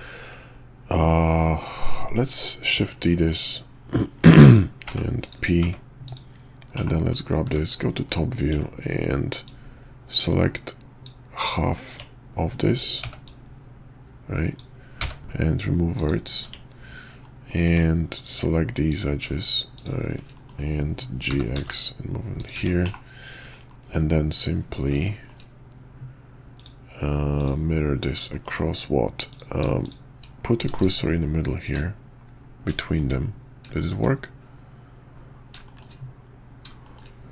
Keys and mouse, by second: 2.7 shift+d, 4.8 p, 5.6 Tab, 6.0 click, 6.7 /, 7.4 `, 8.0 KP_5, 8.5 Tab, 9.4-11.0 drag, 11.4 Tab, 13.0 b, 15.0 x, 16.4 Tab, 17.2 middle drag, 17.7 Tab, 18.1 click, 18.9 click, 19.7 shift+click, 20.3 middle click, 21.2 g, 22.5 Tab, 22.8 /, 23.5 middle click, 25.0 shift+drag, 26.5 click, 27.4-27.7 drag, 28.3 shift+click, 29.3 click, 29.8 shift+click, 30.8 shift+s, 32.8 shift+middle drag, 33.7 shift+middle click, 35.6 shift+middle drag, 36.8 shift+middle click.